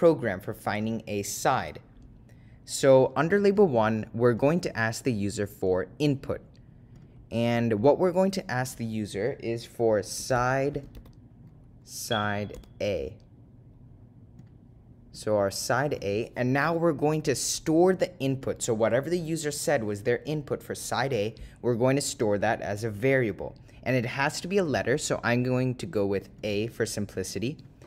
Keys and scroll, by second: 4.5 Right, 5.8 Return, 12.4 0, 14.6 ., 15.4 0, 18.5 ,, 27.7 Return.